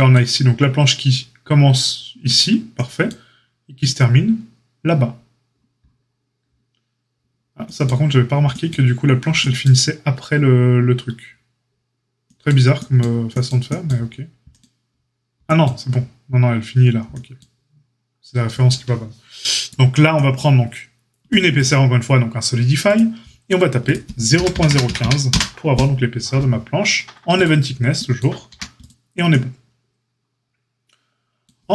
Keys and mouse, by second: 21.5-27.4 drag, 27.4-31.7 middle drag, 28.4 a.